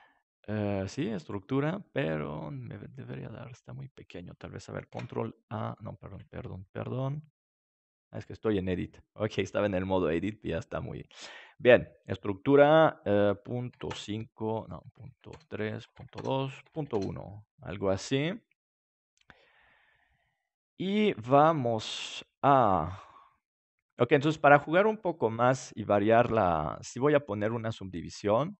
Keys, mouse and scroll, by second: 4.8 ctrl+a, 8.0 Tab, 10.8-12.9 middle drag, 17.1-18.3 drag, 17.6-19.7 middle drag, 24.0-25.0 middle drag, 26.8-28.5 drag.